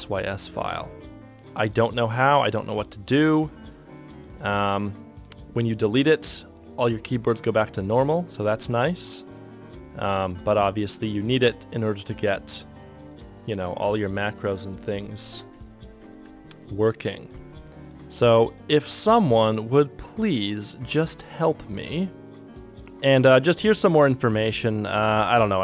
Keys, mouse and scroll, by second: 15.1 Up, 15.4 Down, 16.0 Left, 16.2 Down, 16.4 Right, 18.4 Return, 22.6 alt+F9, 22.6 super+d, 22.6 ctrl+F1.